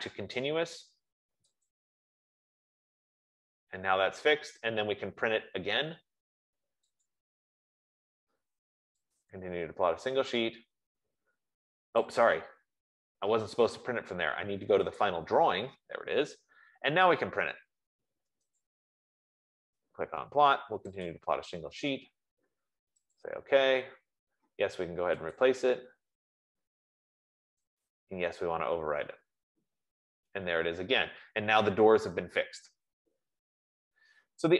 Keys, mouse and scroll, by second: 1.9 click, 7.4 click, 9.7 click, 12.6 click, 15.4 click, 16.7 F15, 18.9 click, 21.6 click, 24.0 click, 26.1 click, 28.0 click.